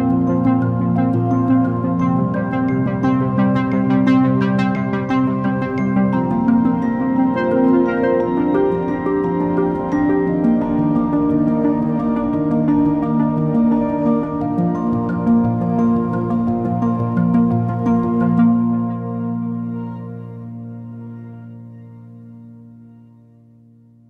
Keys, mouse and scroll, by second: 4.4 Tab, 5.0-5.5 scroll down 7, 5.6-7.7 middle drag, 7.7 shift+a, 13.8 click, 16.2-19.5 drag, 19.5 Tab, 20.0-20.4 scroll up 8, 21.9 click, 23.0 click, 23.7 shift+click.